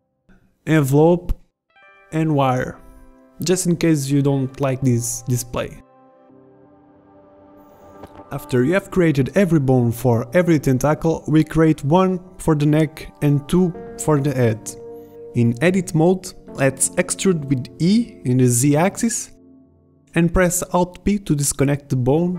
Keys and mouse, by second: 0.6 click, 2.6-5.7 drag, 5.7-11.5 typing, 8.4 middle click, 9.0 click, 10.9 ctrl+z, 11.8 Tab, 12.3 Tab, 14.4 KP_3, 15.5 e, 18.2 alt+p, 21.9 s.